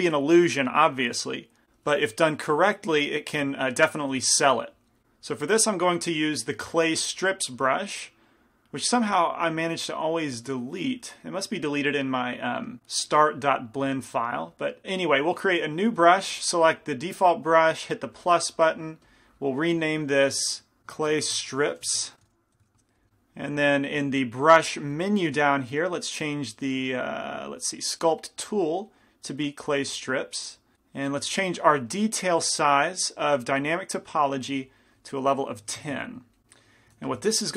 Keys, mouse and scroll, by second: 3.1-5.0 middle drag, 5.0-8.8 drag, 14.8-16.4 drag, 18.3-30.7 drag, 31.4-34.0 middle drag, 33.7-36.4 drag, 36.7 middle click, 37.1 f.